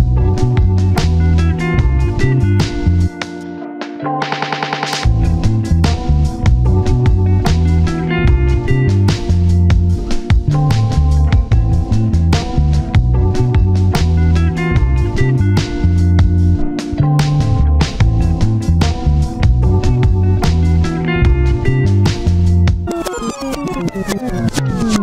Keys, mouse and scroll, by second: 1.8-2.2 scroll down 1, 2.7-3.4 scroll up 2, 2.9 shift+middle click, 3.5 shift+click, 4.0 shift+click, 4.8 shift+click, 5.6 shift+click, 5.9 scroll down 1, 6.1 shift+middle click, 6.2 shift+scroll up 1, 7.2 ctrl+shift+click, 7.5 ctrl+shift+z, 7.9 ctrl+shift+click, 8.4 shift+scroll down 1, 8.8 ctrl+shift+click, 10.2 shift+click, 10.8-11.3 scroll down 2, 12.4 typing, 13.8 double click, 14.1 n, 14.4 Return, 15.4 ctrl+s, 16.7 scroll up 1, 16.9-17.5 scroll down 1, 17.5 double click, 19.1 scroll up 1, 19.3 shift+middle click, 20.0 scroll down 1, 20.3 1, 20.5-21.4 scroll up 1, 21.6 scroll down 1.